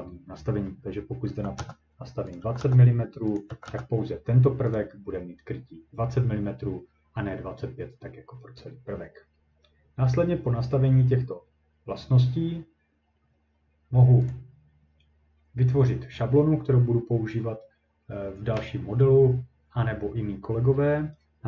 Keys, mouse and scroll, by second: 1.3-3.7 typing, 2.4 click, 3.4 click, 4.8 click, 12.5 middle click, 14.3 click.